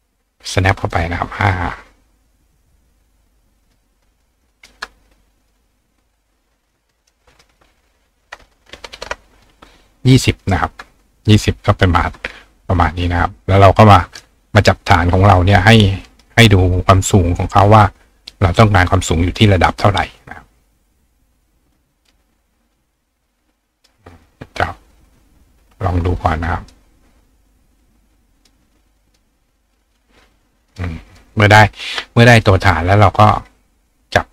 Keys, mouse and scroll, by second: 0.8 click, 1.2 click, 3.6 click, 4.4 click, 5.4 click, 6.7 click, 6.9 right click, 9.4 click, 10.1 click, 10.4 right click, 12.8 click, 13.5 click, 14.1 right click, 14.8 right click, 15.6 click, 17.1 click, 23.2 click, 24.2-26.7 drag, 27.9 click, 29.1 click, 30.7 click, 31.1 click, 33.9-34.3 shift+drag.